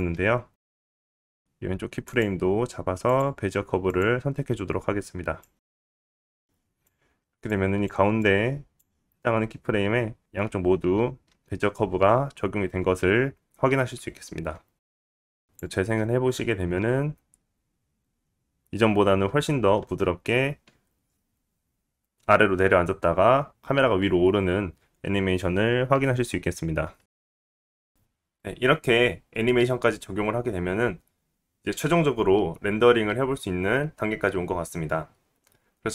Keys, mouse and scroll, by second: 1.7-3.4 drag, 2.0 g, 3.4 middle click, 3.6-5.1 drag, 5.1-6.9 right drag, 6.9 click, 8.1 right click, 8.4 click, 9.6 click, 12.4-35.9 drag, 12.4-27.9 middle drag, 12.4-27.9 right drag, 17.9 space, 22.1 space.